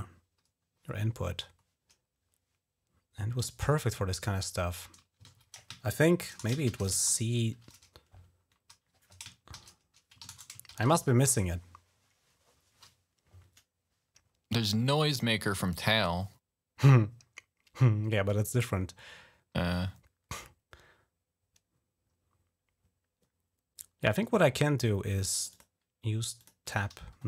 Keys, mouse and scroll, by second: 1.3-3.2 scroll down 7, 3.7-4.6 scroll down 1, 5.0 ctrl+a, 6.2 BackSpace, 6.4 shift+c, 6.9 shift+8, 9.3-12.1 typing, 10.0 ctrl+a, 16.6-17.1 scroll down 2, 20.0 scroll down 2, 21.8-22.2 scroll down 2, 25.2 click, 25.3 click, 26.2 click, 26.4 click.